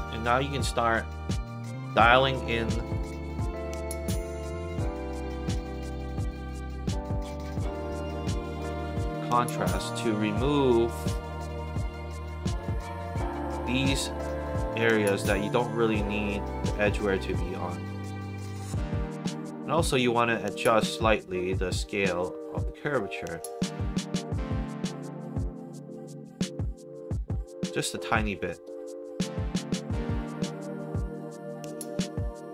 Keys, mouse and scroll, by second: 0.4 alt+right click, 2.8 click, 2.9 click, 4.7 click, 9.7-11.8 drag, 15.4-17.4 drag, 19.5 middle click, 20.3 click, 20.4 click, 22.5-24.6 drag, 31.0 click, 31.1 click.